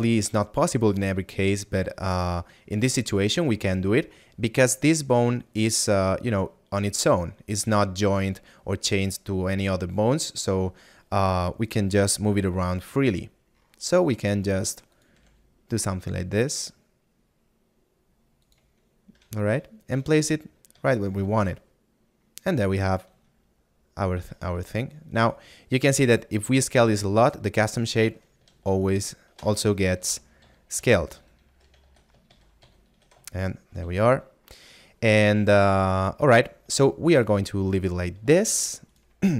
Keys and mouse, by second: 1.5 middle click, 13.2 middle click, 19.7 middle click, 21.1 middle click, 25.8 s, 26.5 click, 30.9 ctrl+z, 32.3 z.